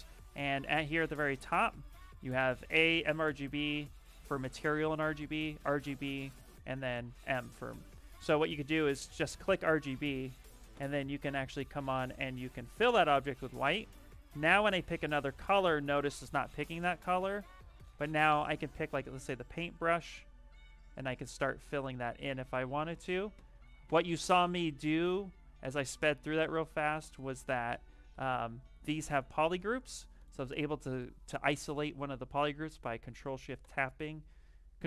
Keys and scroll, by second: 0.5 shift+m, 7.0 shift+m, 9.6 s, 17.8 a, 27.6 f, 28.0 f, 28.7 shift+f.